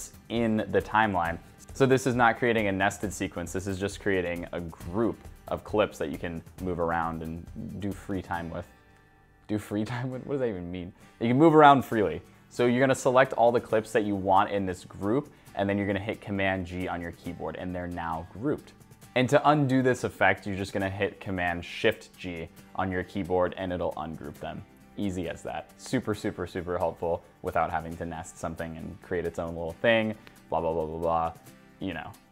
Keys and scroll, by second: 16.3 super+g, 21.6 shift+super+g.